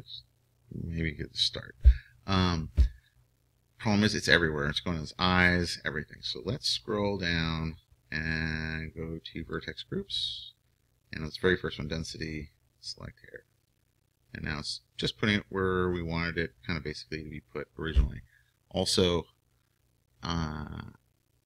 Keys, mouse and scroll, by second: 13.7-21.4 drag.